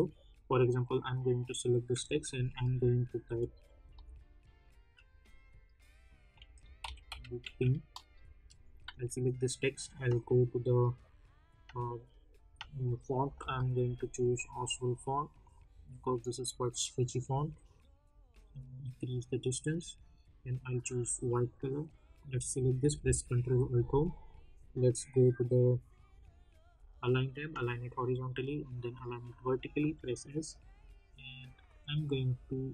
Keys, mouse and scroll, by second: 0.8 click, 3.2 shift+l, 3.7 shift+o, 6.2-7.9 typing, 8.8 ctrl+a, 10.0 click, 13.0-14.4 typing, 15.4 click, 17.7-20.7 drag, 23.9 ctrl+alt+Home, 26.8 click, 29.8 s, 30.5-32.7 drag.